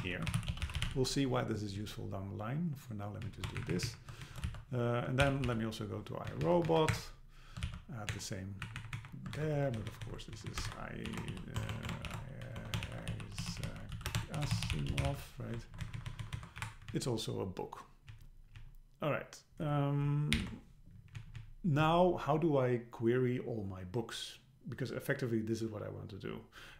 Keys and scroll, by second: 1.8 Down, 3.2 Down, 3.6 shift+Up, 4.3 shift+super+Left, 4.5 super+c, 5.2 super+k, 6.3 Down, 6.9 Return, 7.7 super+v, 8.1 Return, 8.7 Up, 9.2 Up, 9.4 super+Right, 9.8 alt+Left, 10.3 Left, 10.7 shift+super+Right, 11.6 BackSpace, 12.1 BackSpace, 15.7 alt+Left, 16.6 Left, 16.6 Delete, 16.9 Down, 18.1 Down, 20.4 alt+h, 21.2 Down.